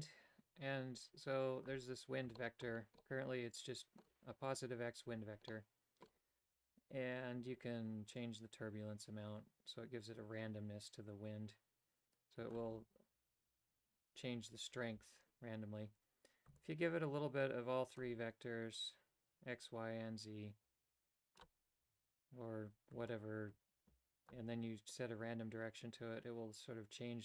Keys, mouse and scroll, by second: 2.4 shift+middle click, 3.0-4.0 middle drag, 5.5 middle click, 8.2-12.5 drag, 16.6-18.0 shift+drag, 18.8-21.4 shift+drag, 23.1-24.3 shift+drag, 24.9-27.2 drag.